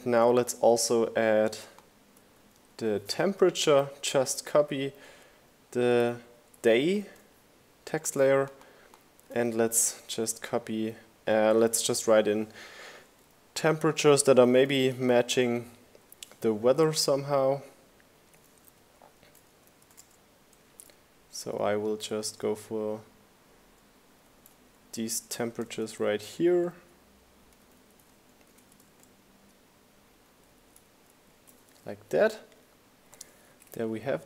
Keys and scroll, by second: 0.8 super+v, 1.2 shift+Right, 4.0 shift+Right, 8.3 super+a, 15.8 Right, 17.5 Return, 18.9 4, 19.3 BackSpace, 21.6-22.8 typing, 23.2 Return, 25.2 1, 25.5 4, 26.1 shift+^, 26.5 Return, 27.8-29.5 typing, 31.3 Right.